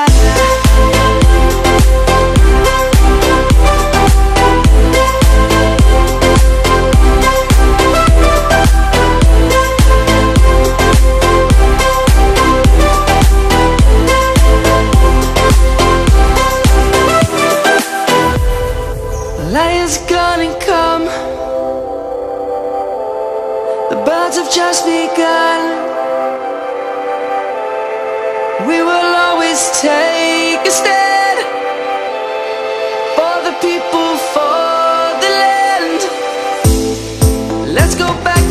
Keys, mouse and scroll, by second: 4.5-6.0 shift+drag, 9.5-10.4 click, 17.6-18.3 click, 23.4-26.3 shift+click, 27.0-27.6 click, 27.8 right click, 28.5 click, 29.9 ctrl+=, 30.2 space, 30.7 ctrl+-, 30.9 space, 31.1 click, 31.3 space, 31.8 ctrl+-, 33.0 click, 35.5 click, 38.2 click, 38.4-38.5 alt+drag.